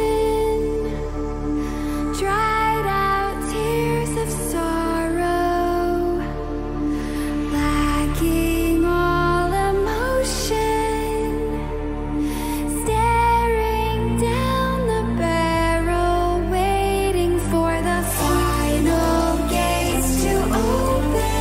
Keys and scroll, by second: 14.7-20.5 typing.